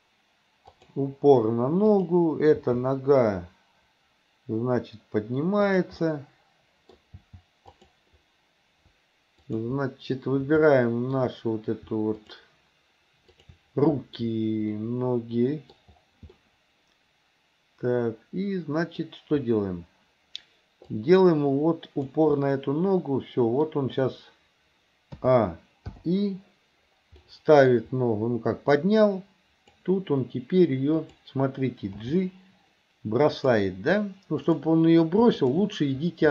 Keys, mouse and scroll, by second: 1.9 click, 2.6 g, 6.1-7.2 middle drag, 7.2 g, 9.5 click, 10.8-11.3 shift+middle drag, 12.2 shift+click, 13.4 shift+click, 14.8-15.8 middle drag, 16.4-19.0 middle drag, 21.1-22.2 drag, 22.4 scroll up 1, 22.6-23.7 middle drag, 25.3 a, 26.0 i, 27.3 middle click, 28.8-29.9 drag, 31.0 click, 32.1 g, 34.5 click, 35.4 shift+click.